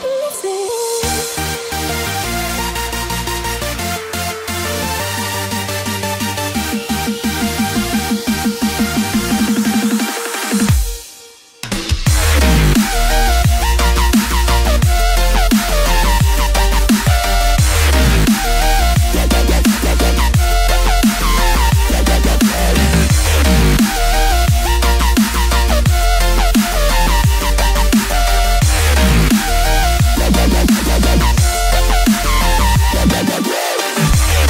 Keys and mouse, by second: 3.5 shift+a, 11.1-14.3 drag, 15.2 click, 17.3-18.4 drag, 19.6-22.1 middle drag, 24.4 Tab, 26.5 a, 30.1 r.